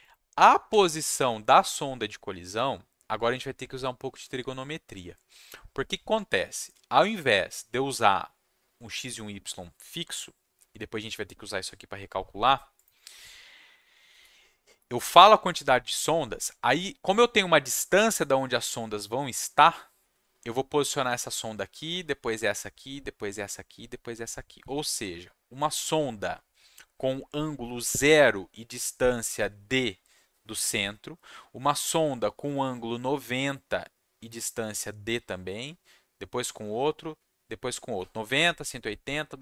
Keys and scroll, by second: 0.7 Tab.